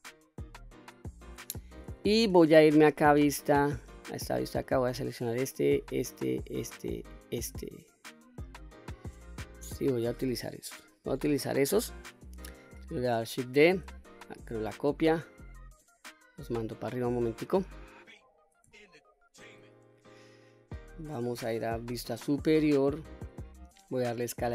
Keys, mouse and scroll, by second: 0.0-1.1 scroll up 2, 1.3-1.7 shift+middle drag, 2.7 3, 4.0 click, 5.5 shift+click, 6.2 shift+click, 7.1 shift+click, 13.4 shift+d, 14.6 right click, 15.8-16.9 drag, 17.2 middle click, 18.2 scroll up 2, 18.8 shift+middle click, 19.9 middle click, 20.7-21.8 scroll down 1, 21.8-22.1 scroll down 1, 21.8 KP_7, 22.5-23.2 scroll up 2, 24.2 s, 24.4 x.